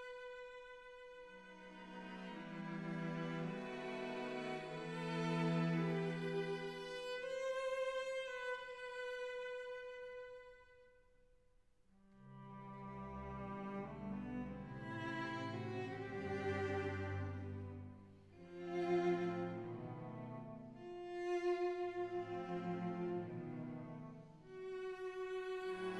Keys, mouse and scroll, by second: 3.8 click, 8.0 ctrl+r, 8.8 click, 10.4 ctrl+r, 11.1 click, 12.2 3, 13.7 1, 14.3 click, 14.8 shift+click, 15.2 shift+click, 17.2 shift+click, 17.7 shift+click, 18.2 shift+click, 19.2 KP_1, 19.7 s, 19.9 x.